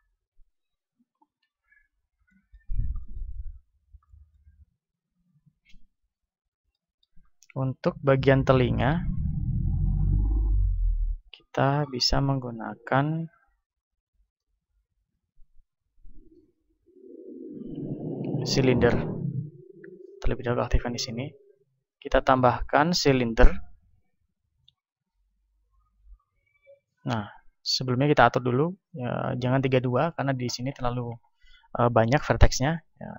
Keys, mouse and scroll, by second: 0.0 ctrl+Up, 1.4 KP_1, 1.7-8.1 middle drag, 3.4-6.6 drag, 8.8-10.9 drag, 10.3 a, 11.7-15.5 drag, 15.1 shift+a, 18.7-19.9 drag, 19.9 t, 21.9-24.3 drag, 22.6 shift+a, 29.8-31.7 drag.